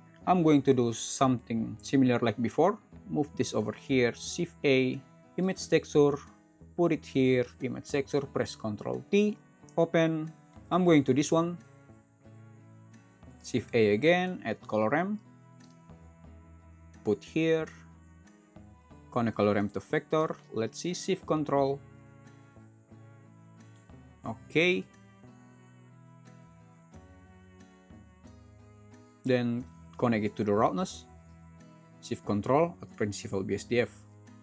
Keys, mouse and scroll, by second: 4.3 shift+a, 5.3 shift+a, 8.7 ctrl+t, 13.4 shift+a.